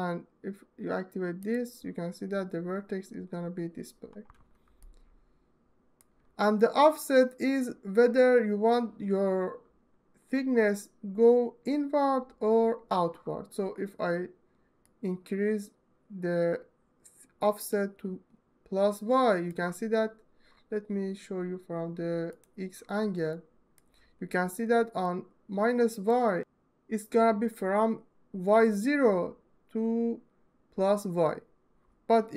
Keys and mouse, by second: 1.1 click, 4.6-5.8 alt+middle drag, 14.6-17.6 middle drag, 17.6-19.3 drag, 23.1-23.6 alt+shift+middle drag, 24.8-25.9 drag.